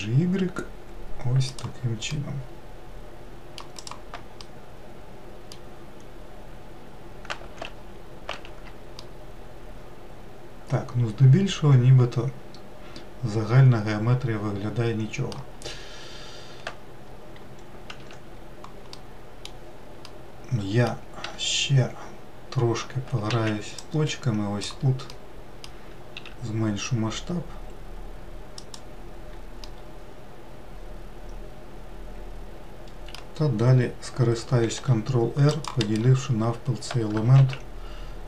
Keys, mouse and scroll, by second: 2.7-4.4 middle drag, 4.4 click, 5.1-6.8 middle drag, 6.8-7.9 scroll up 2, 8.9 alt+z, 9.6-12.6 middle drag, 16.2-18.6 scroll down 1, 18.6 1, 19.6-21.8 middle drag, 21.8 1, 23.9 alt+z, 24.4 click, 25.7-26.8 middle drag, 26.8 s, 30.3-33.3 middle drag, 35.3 ctrl+r, 38.0 alt+z.